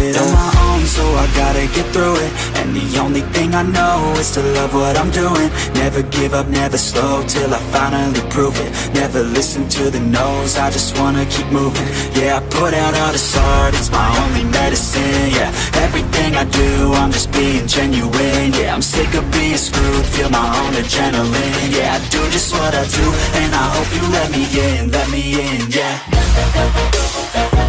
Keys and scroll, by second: 11.7 ctrl+d, 15.9 ctrl+d, 18.6 ctrl+d, 23.9 ctrl+t.